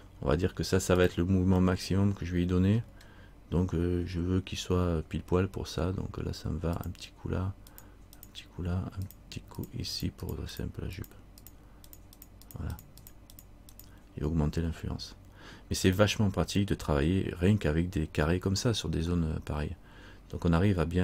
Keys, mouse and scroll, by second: 1.8 middle click, 4.2 scroll up 1, 6.9 click, 19.3 middle click.